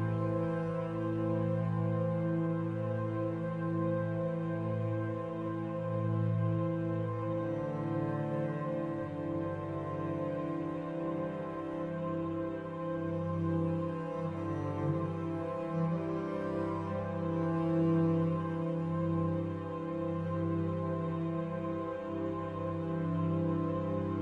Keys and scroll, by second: 0.9 ctrl+0, 13.5 ctrl+t.